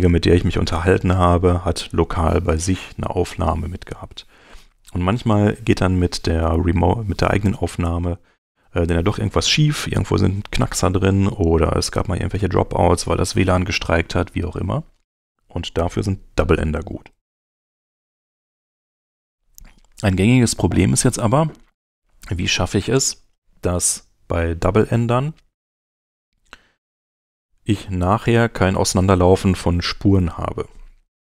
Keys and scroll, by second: 25.5 s.